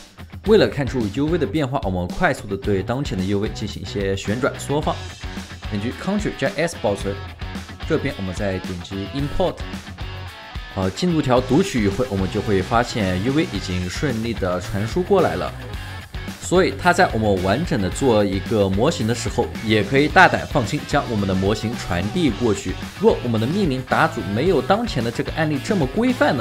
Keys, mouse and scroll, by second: 1.4 alt+right click, 1.8 space, 1.9 right click, 2.2 space, 3.8 space, 4.7 right click, 6.3 ctrl+s, 12.6 alt+right click, 13.3 alt+middle click, 13.8 alt+right click, 18.3 alt+middle click.